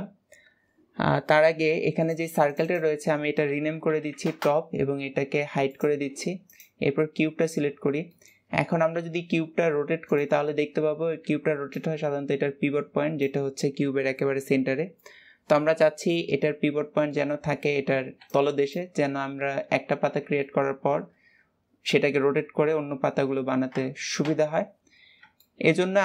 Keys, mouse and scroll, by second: 1.9 click, 2.3 click, 2.5-5.7 drag, 6.3 click, 6.9-8.3 middle drag, 8.3-8.7 scroll up 1, 8.7 r, 10.3-17.1 middle drag, 17.4-23.4 middle drag, 24.1 KP_1, 25.3-25.7 shift+middle drag, 25.7-26.0 scroll up 2.